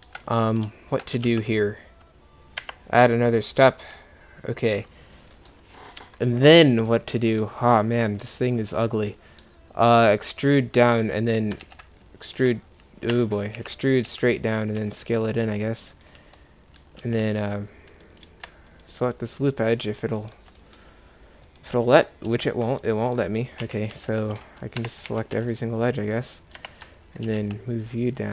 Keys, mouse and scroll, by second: 1.2 g, 5.1 middle click, 9.9 e, 11.7 ctrl+z, 12.4 s, 13.6 e, 14.8 s, 17.1 a, 18.0 click, 23.7-25.4 typing, 27.5 g.